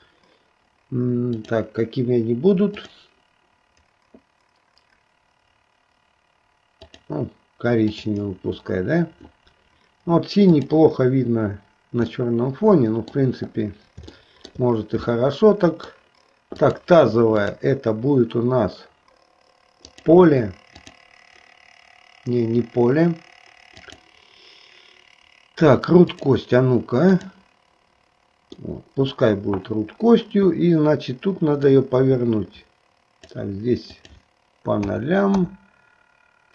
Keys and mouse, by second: 1.4 click, 2.9-7.2 drag, 7.9 click, 12.2-13.4 middle drag, 14.2 shift+middle click, 15.2 middle click, 16.7 click, 17.6-20.2 drag, 20.9 click, 23.8-26.4 drag, 27.2 click, 28.7 middle click, 31.7-33.5 drag, 34.0-35.6 drag.